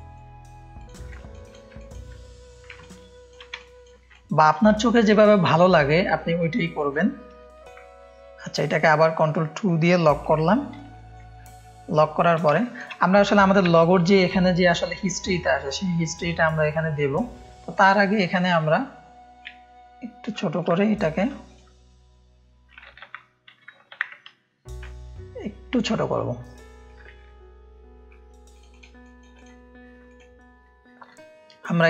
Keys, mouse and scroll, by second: 0.7 click, 1.1 ctrl+space, 1.7 ctrl+click, 1.8 ctrl+space, 2.8 ctrl+click, 3.5 click, 4.1 ctrl+click, 4.1 space, 4.7 click, 4.7 space, 5.1 ctrl+click, 5.2 ctrl+space, 6.5 click, 7.3 ctrl+space, 7.5 ctrl+click, 8.3 click, 10.1 ctrl+2, 10.9 ctrl+2, 10.9 click, 10.9 space, 11.5 ctrl+space, 11.6 ctrl+click, 12.6 click, 12.6 space, 13.7 click, 13.7 space, 16.7 click, 16.7 space, 17.5 ctrl+space, 17.5 ctrl+click, 18.1 click, 19.4 alt+shift+click, 20.6 shift+click, 23.1 ctrl+z, 24.8 alt+shift+click, 26.8 Up, 27.2 Up, 28.5 click, 28.9 space, 29.1 click, 30.0 click.